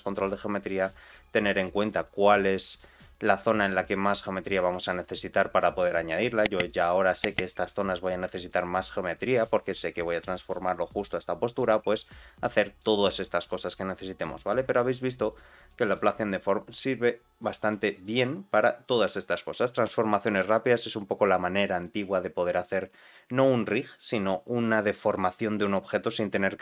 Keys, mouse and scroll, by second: 0.1 g, 1.6-3.2 middle drag, 4.4-4.7 scroll down 2, 4.7 shift+middle click, 5.5 click, 6.3 scroll up 2, 6.6 shift+middle click, 7.9 scroll down 2, 8.3 shift+middle click, 11.9-12.4 scroll up 2, 12.4 middle click, 12.9 scroll down 2, 13.2 shift+middle click, 13.6-14.6 middle drag, 15.2 click, 15.6 middle click, 16.2 r, 17.7 g, 19.9 click, 20.3 g.